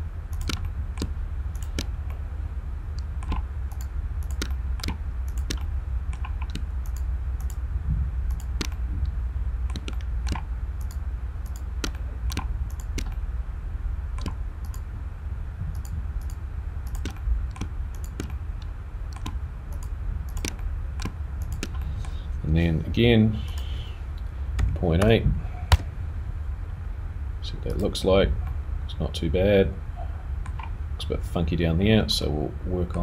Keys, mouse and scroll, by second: 0.5 shift+click, 0.6 middle click, 1.8 shift+click, 2.1 middle click, 3.8 shift+click, 4.2 shift+click, 4.5 middle click, 5.4 shift+click, 5.6 middle click, 6.8 shift+click, 7.4 shift+click, 8.3 shift+click, 8.7 middle click, 10.0 middle click, 10.8 shift+click, 11.8 shift+click, 11.9 middle click, 12.7 shift+click, 13.1 middle click, 14.6 shift+click, 17.1 shift+click, 17.2 middle click, 18.2 shift+click, 18.3 middle click, 19.7 shift+click, 20.5 shift+click, 20.6 middle click, 21.4 shift+click, 21.8 middle click, 23.5 click, 28.5 middle click, 31.5-32.2 scroll up 2, 32.2 middle click, 32.9-33.0 scroll down 1.